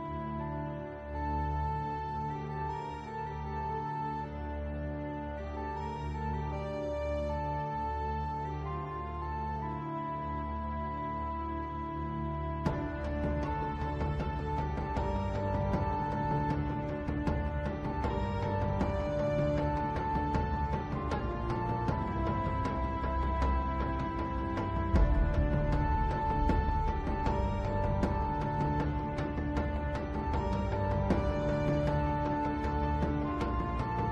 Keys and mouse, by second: 7.3 z, 8.4 Tab, 10.5 click, 12.9 click, 13.2 z, 13.8 click, 16.2 g, 22.8 click, 24.5 g, 30.9 click.